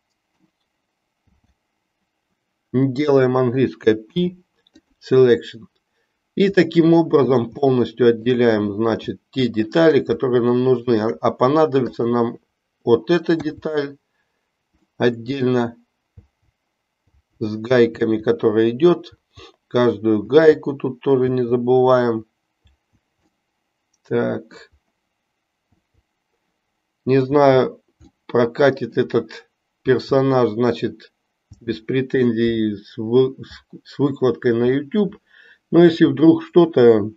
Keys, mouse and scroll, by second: 1.3 l, 4.0 p, 6.7 middle click, 7.7 shift+middle click, 9.2 shift+middle click, 10.3 shift+middle click, 11.9 click, 13.3-23.3 l, 14.9 middle click, 23.3-24.7 middle drag, 25.7 l, 28.2 middle click, 32.3-35.0 middle drag.